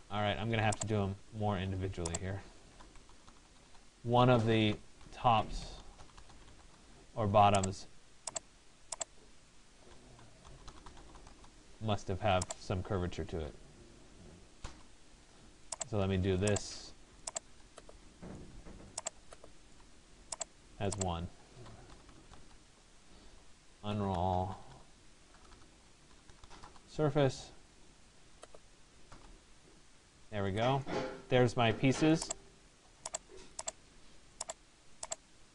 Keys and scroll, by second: 10.9 Return, 22.0 Return.